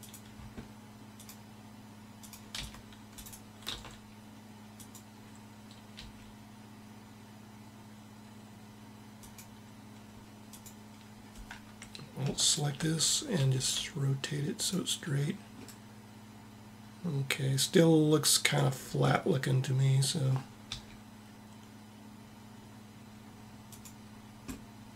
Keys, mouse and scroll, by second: 2.3 c, 3.3 r, 5.9 g, 10.1-11.9 drag, 12.2-14.0 drag, 13.1 r, 20.4 s, 24.3-24.9 middle drag.